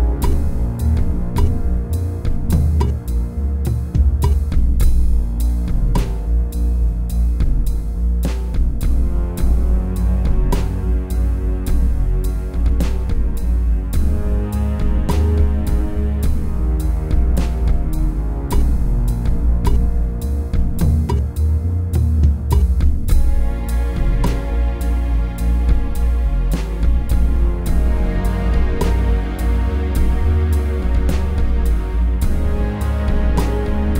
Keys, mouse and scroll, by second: 25.5 a.